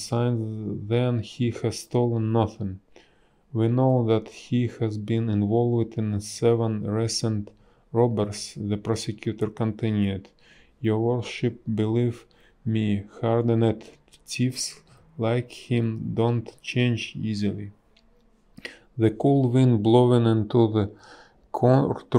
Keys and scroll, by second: 3.0 space, 4.8 ctrl+a, 6.1 ctrl+z, 6.4 a, 11.4 space, 14.5 space, 16.3 b, 17.0 space.